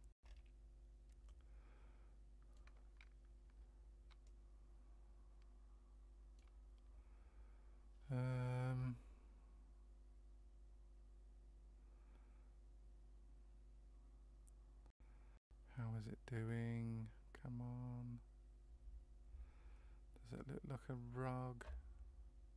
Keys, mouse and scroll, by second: 0.3 scroll up 4, 1.2 middle click, 4.2 shift+middle click.